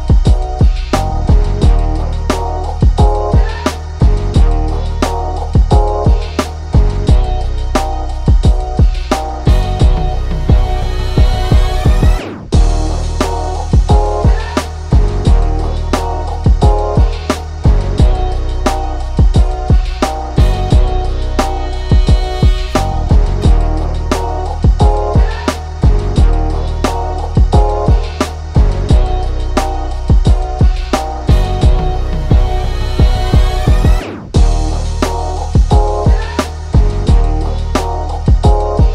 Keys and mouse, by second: 2.3 ctrl+z, 3.4-4.7 drag, 4.8-8.8 drag, 8.9-10.3 drag, 12.3 click, 13.5-16.8 drag, 16.8 ctrl+z, 17.1-18.4 drag, 18.4 ctrl+z, 18.9 click, 19.3 ctrl+z, 20.4-22.9 drag, 23.0-25.6 drag, 25.6 ctrl+z, 25.9-29.2 drag, 29.5 click, 31.2 ctrl+click, 31.3 ctrl+-, 31.8 click, 33.9 right click, 34.3 click, 37.6 click.